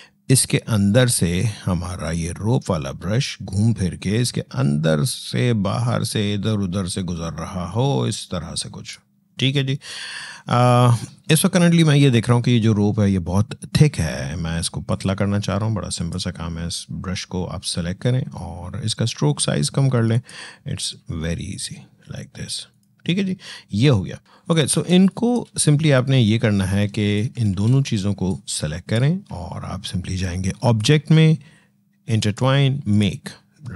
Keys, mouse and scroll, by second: 14.7 click, 19.9 click, 24.2 alt+scroll down 1, 24.3 click, 24.7 space, 24.9 click, 27.3 ctrl+z, 28.1 click, 29.2-29.7 alt+scroll up 2, 29.7-30.4 alt+scroll down 1, 30.4 click.